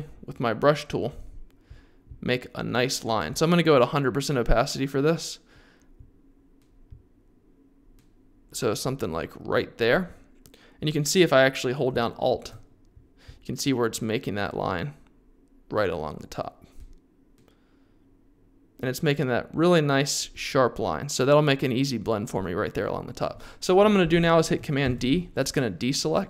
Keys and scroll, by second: 24.8 super+d.